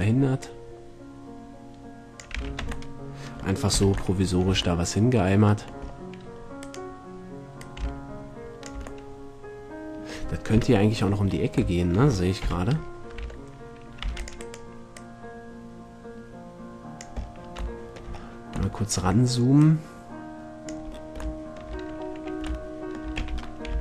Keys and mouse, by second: 0.2 click, 2.5 a, 2.8 Tab, 3.9 z, 4.7 a, 8.8-9.2 drag, 9.2-9.6 middle drag, 10.7 KP_7, 12.6 z, 13.4 Tab, 14.2 c, 14.7-16.4 right drag, 15.2-16.6 drag, 17.4 middle click, 19.8-21.6 drag, 23.4 e.